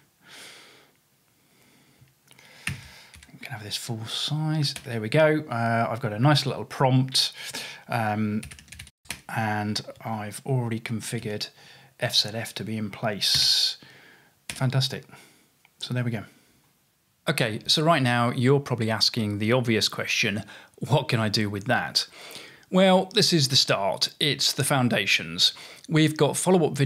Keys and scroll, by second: 2.7 ctrl+p, 8.3-9.6 typing, 11.2 ctrl+r, 14.5 Return.